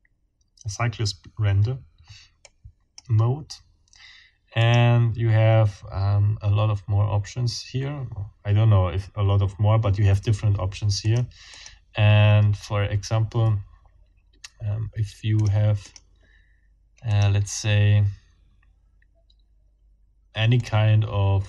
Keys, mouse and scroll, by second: 2.4 click, 4.6 click, 11.0 click, 11.5 click, 15.4 click, 15.8 click, 16.0 scroll up 2, 17.1-17.4 scroll up 2, 20.6 scroll up 2.